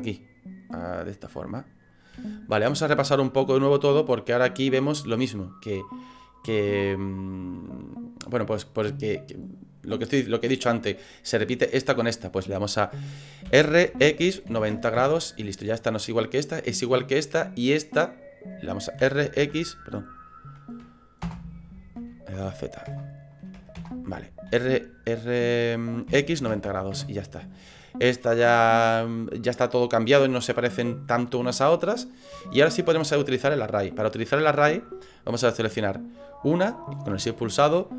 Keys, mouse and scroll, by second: 1.8 right click, 2.2 shift+middle click, 4.6 right click, 13.5 r, 18.1 right click, 19.0 r, 22.9 Return, 22.9 /, 23.6 /, 23.8 Return, 24.5 r, 31.8 scroll down 5, 32.5 shift+middle click, 36.3 right click.